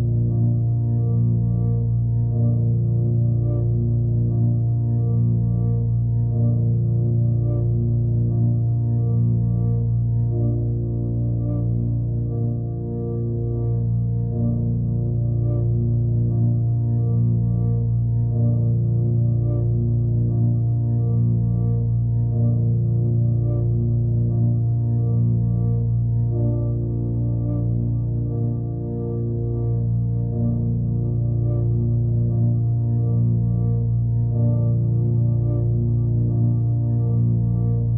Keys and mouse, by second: 0.6 click, 5.2 click, 7.6 ctrl+s, 9.2 click, 10.6 click, 11.6 click, 14.0 click, 15.4 s, 16.4 click, 17.6 click, 18.6 alt+click, 19.3 alt+click, 20.0 click, 21.4 click, 22.1 alt+click, 23.4 click, 24.4 click, 24.8 click, 27.3-27.6 typing, 29.3-31.3 drag, 31.9 click, 32.9-33.9 drag, 34.6 click, 35.7 alt+click, 37.5-37.9 drag.